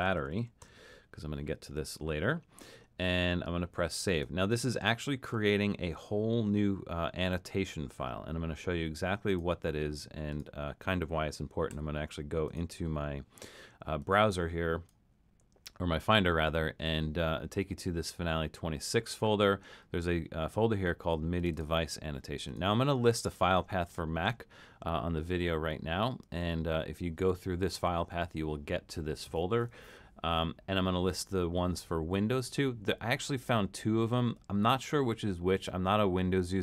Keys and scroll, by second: 0.0-1.2 typing.